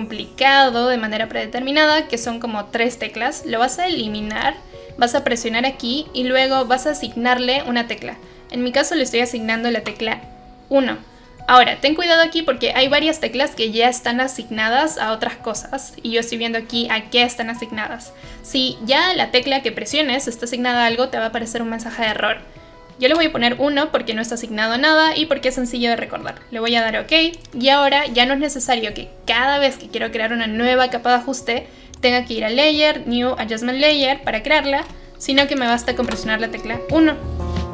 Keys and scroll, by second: 23.0 1, 35.3 Delete, 36.0 1.